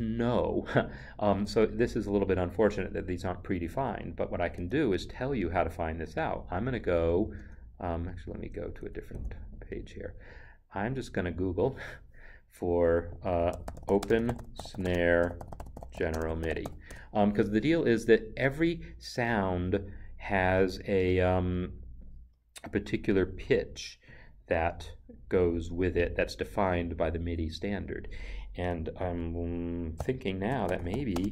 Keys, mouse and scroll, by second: 4.5 click, 7.4 alt+Tab, 8.9 alt+Tab, 9.2 alt+Tab, 11.2 alt+Tab, 11.3 click, 13.2 click, 13.5-16.6 typing, 16.9 Return, 30.0 ctrl+f, 30.6 o, 30.7 p, 30.9 e, 31.1 space.